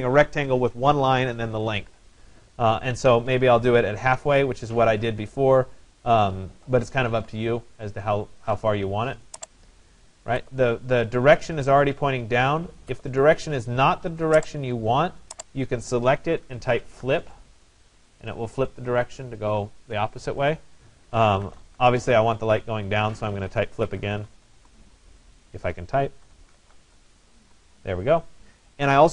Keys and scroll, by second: 17.1 Return, 21.5 Return.